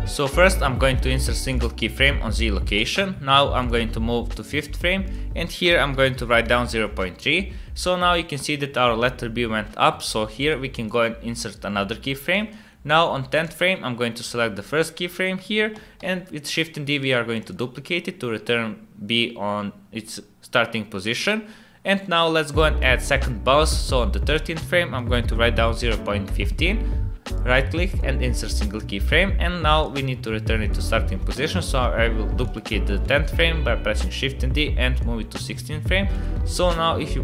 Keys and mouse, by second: 0.9 click, 3.7-8.0 drag, 10.4 click, 12.3 click, 13.4 click, 16.0 shift+d, 22.2 click, 24.3-27.4 drag, 27.4 middle click, 29.8 click, 31.5 shift+d, 33.1-35.0 drag, 36.1 click, 36.3 space.